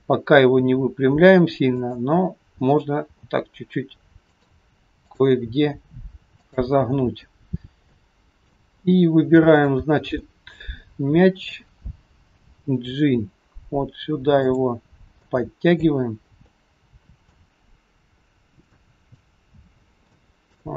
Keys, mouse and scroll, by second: 1.7 click, 3.1 r, 5.2 click, 5.9 r, 7.5-7.8 scroll up 2, 8.0 middle click, 9.6 click, 10.3 middle click, 12.4 g, 15.2 middle click, 17.8-19.3 scroll up 6, 18.7 shift+middle click, 19.8 scroll down 2, 20.1 shift+middle click.